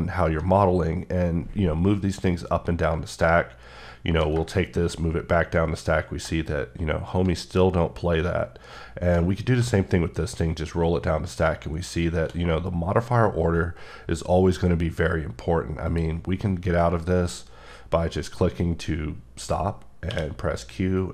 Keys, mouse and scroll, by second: 0.5-1.2 scroll down 1, 2.9-3.6 ctrl+scroll down 2, 3.7 ctrl+scroll up 1, 4.4 scroll up 1, 5.8-6.3 shift+scroll up 2, 7.3-7.8 ctrl+scroll up 1, 8.7 ctrl+scroll down 2, 9.8 shift+scroll down 2, 11.3-11.9 shift+scroll up 2, 12.4 scroll up 1, 13.3 scroll up 1, 15.8 click, 20.1 q.